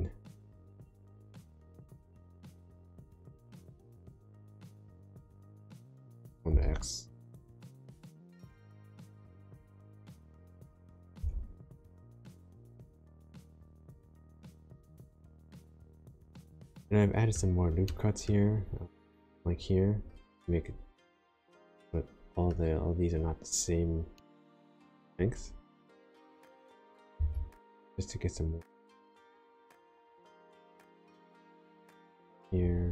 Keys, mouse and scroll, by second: 1.6 g, 2.1 g, 3.8 right click, 4.3 g, 6.5 x, 8.1 click, 9.4 click, 11.1 g, 11.7 x, 14.8 click, 15.5 middle click, 17.8 middle click, 18.2-18.8 scroll up 1, 21.4 middle click, 24.1 middle click, 27.1 ctrl+r, 30.1-31.1 scroll up 1, 31.1 click.